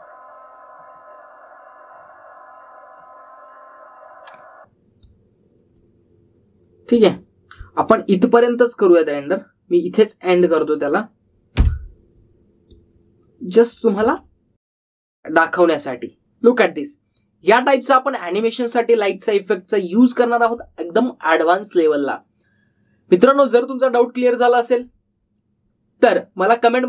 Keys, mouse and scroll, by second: 4.7 click, 12.6 n, 13.7-14.9 drag, 14.9 space.